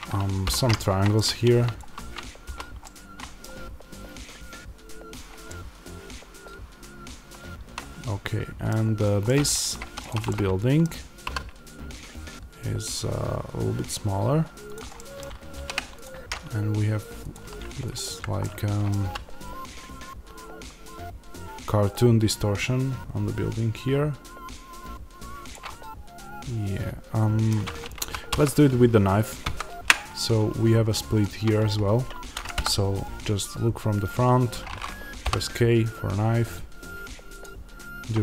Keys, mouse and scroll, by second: 0.3 f, 0.6-1.7 middle drag, 1.7 alt+click, 2.4 f, 2.7-9.9 middle drag, 9.7 3, 9.9 click, 10.2-17.2 middle drag, 11.2 s, 15.4 ctrl+r, 17.2 click, 18.4 middle click, 18.9 s, 25.4 click, 25.6 middle click, 27.9 ctrl+z, 32.5 KP_1, 33.1-33.8 scroll up 1, 33.8-35.1 scroll down 1, 35.1 k.